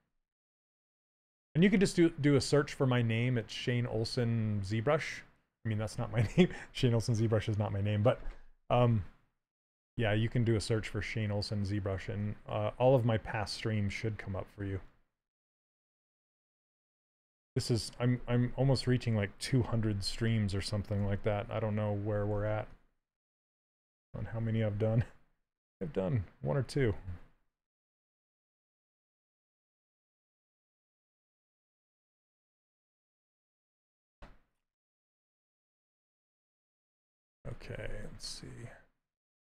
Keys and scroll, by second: 18.1 s, 19.3 w, 20.7 q, 22.0 s.